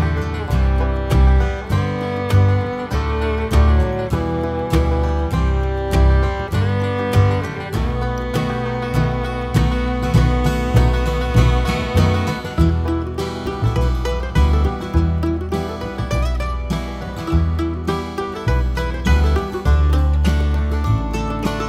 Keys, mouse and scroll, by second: 1.0 ctrl+right click, 3.0 ctrl+r, 5.4 alt+a, 5.6 `, 6.6 KP_1, 6.9 scroll down 2, 7.1 scroll up 2, 7.6 alt+click, 8.6 g, 9.2 alt+click, 9.6 g, 10.4 KP_Decimal, 10.8-11.2 scroll down 1, 11.2 alt+click, 11.4-13.6 typing, 13.4 click, 14.2 ctrl+r, 16.2 click, 17.0 ctrl+r, 18.0 Tab, 18.1 scroll down 1, 19.7-20.0 scroll down 1, 20.2 scroll up 1.